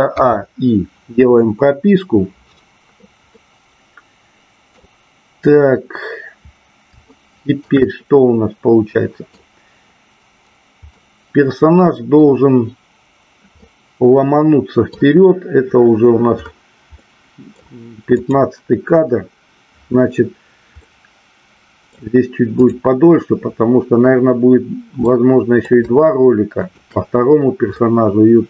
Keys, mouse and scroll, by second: 3.3-4.7 middle drag, 7.0-7.7 shift+middle drag, 7.8-9.3 middle drag, 11.0-12.2 middle drag, 13.6-14.9 middle drag, 16.8 middle click, 18.2 click, 20.8-21.8 middle drag, 22.6-23.4 drag, 25.1 middle click, 26.6 shift+click, 27.7-28.4 middle drag.